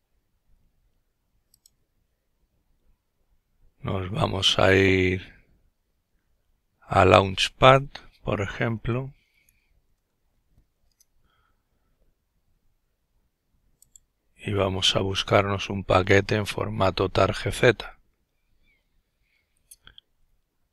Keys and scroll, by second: 7.7-10.5 typing, 11.6 typing.